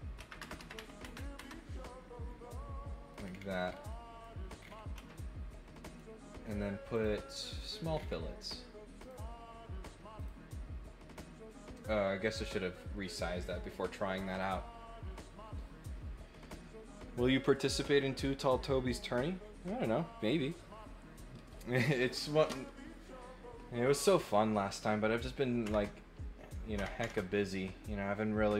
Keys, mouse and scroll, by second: 2.5 middle click, 3.2-3.7 scroll down 2, 3.9 middle click, 4.6 scroll up 1, 5.4 middle click, 6.9 click, 7.9 scroll up 2, 8.0 middle click, 9.0 click, 10.1 click.